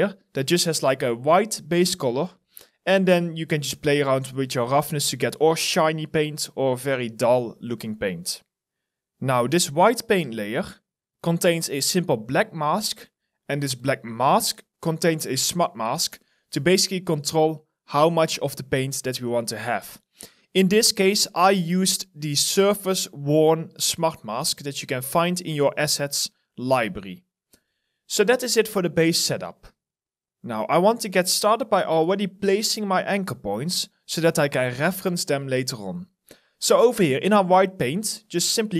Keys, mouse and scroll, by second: 15.7 alt+right click, 21.3 alt+right click, 26.9 middle click, 27.5 middle click, 29.2 alt+middle click.